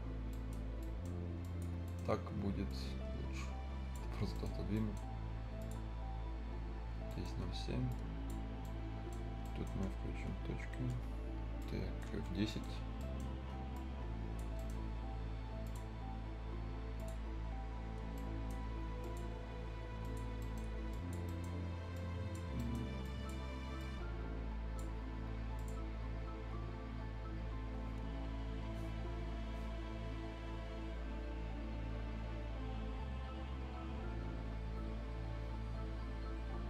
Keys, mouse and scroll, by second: 0.3 right click, 0.8 right click, 1.1 scroll up 1, 1.4 click, 1.8 right click, 2.1 scroll up 1, 2.7-4.1 drag, 4.1 scroll up 1, 4.3 right click, 5.6 click, 6.9 scroll down 1, 7.1 right click, 7.4 scroll up 1, 7.9 click, 8.6 right click, 10.9 F7, 11.1-11.6 scroll up 1, 11.6 right click, 12.1 F10, 12.4 right click, 13.7 click, 14.5 right click, 15.6 click, 15.9 scroll up 1, 16.9 click, 17.2-17.7 scroll down 1, 17.7-18.0 scroll up 1, 18.1 right click, 19.0 click, 20.4 right click, 20.6 scroll up 1, 20.9 click, 20.9 click, 21.2 right click, 21.9 click, 22.5 scroll down 1, 22.5 right click, 23.0 click, 23.5 scroll up 1, 23.8-25.6 drag.